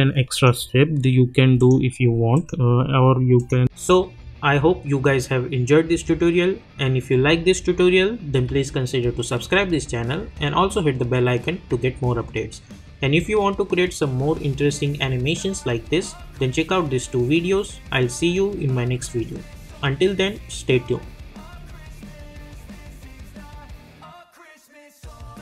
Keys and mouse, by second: 0.5 right click, 1.6 click.